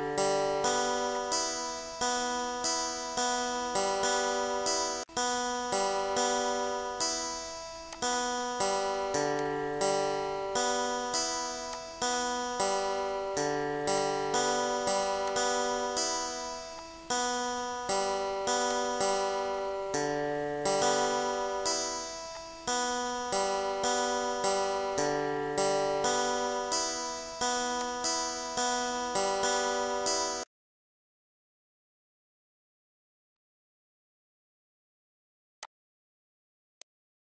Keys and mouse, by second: 1.8 click, 2.4 click, 3.0 click, 3.5 click, 5.7 click, 6.7 click, 7.7 click, 9.1 click, 11.8 click, 13.0 Delete, 14.1 click, 15.3 click, 19.1 click, 19.7 click, 26.2 click, 27.3 click, 28.0 ctrl+d, 28.5 click, 33.1 click, 33.9 click, 34.5 click, 35.5 click, 36.0 click, 36.5 4, 36.7 Return.